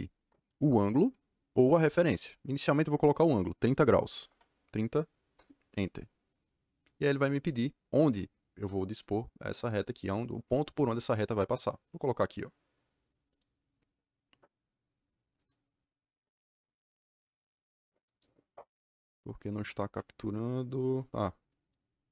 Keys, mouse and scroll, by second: 4.1 KP_3, 4.2 KP_0, 5.2 KP_Enter, 13.2 click, 15.3 click, 18.0 click, 19.8 Escape, 20.0 Escape.